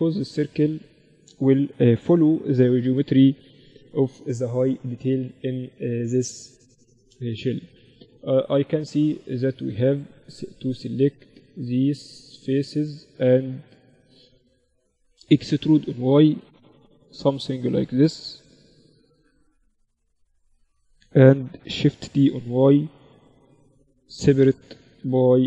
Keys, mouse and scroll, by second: 7.8-9.7 middle drag, 9.0-11.1 drag, 9.7 z, 10.1 z, 10.7 middle click, 10.7 right click, 11.1-13.7 right drag, 12.0 z, 12.8 click, 14.8 e, 15.2 middle click, 21.2 shift+d, 24.3 p, 25.2 Tab.